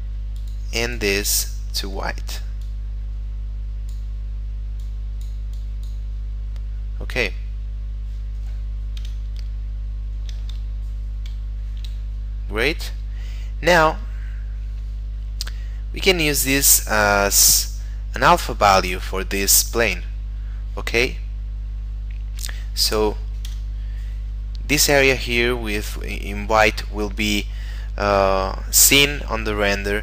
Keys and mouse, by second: 0.4 click, 4.8 click, 9.0 F12, 11.3 Escape, 12.5 middle click, 15.7 middle click, 21.3 middle click, 23.5 F12.